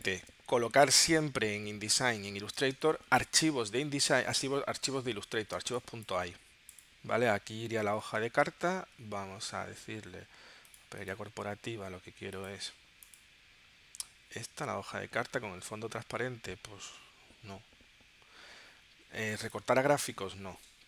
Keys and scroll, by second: 2.6 space, 5.6 space, 8.1 super+d.